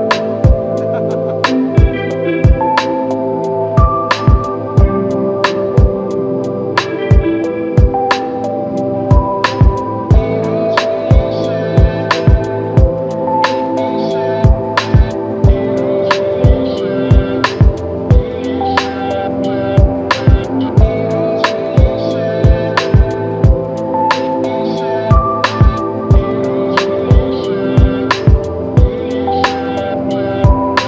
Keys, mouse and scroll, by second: 10.1 double click, 11.4-11.7 typing, 15.5 double click, 20.8 ctrl+scroll up 1, 23.1 ctrl+scroll down 1, 25.9 typing.